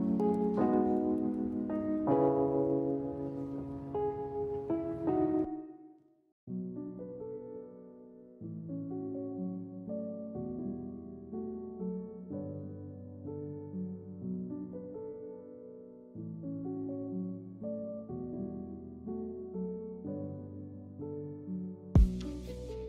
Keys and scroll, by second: 14.9 Delete, 16.6 ctrl+z, 19.8 Delete, 21.0 Delete.